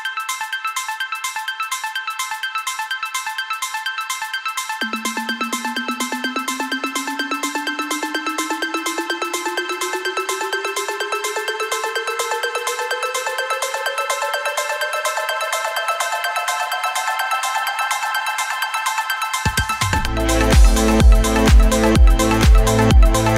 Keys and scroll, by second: 3.2 BackSpace.